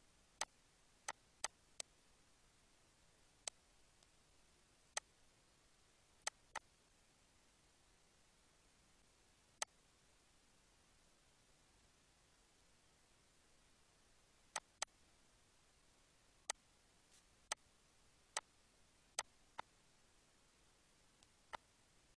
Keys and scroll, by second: 17.0 ctrl+s, 20.5 ctrl+s.